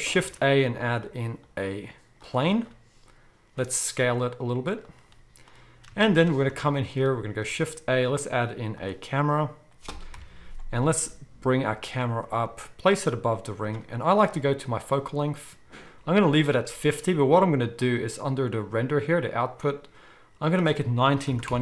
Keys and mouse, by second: 0.2 shift+a, 0.7-3.2 middle drag, 3.6 s, 3.7-11.0 middle drag, 7.4 shift+a, 10.1 KP_0, 10.8 g, 12.4 g, 15.6-16.8 middle drag, 17.8 click, 20.5-21.6 drag.